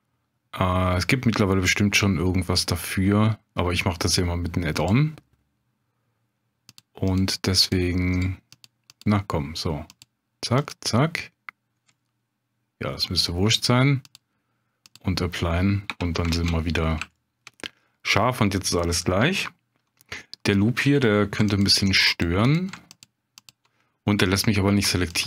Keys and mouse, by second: 6.7 click, 7.1 click, 7.6 click, 8.1 click, 8.5 click, 8.9 click, 9.9 click, 10.6 click, 11.9-12.9 middle drag, 14.2-14.9 drag, 15.9 Tab, 16.3 ctrl+space, 17.1 shift+click, 17.6 click, 22.2 click, 22.4 click, 22.9 alt+click, 23.4 alt+click, 24.3 click.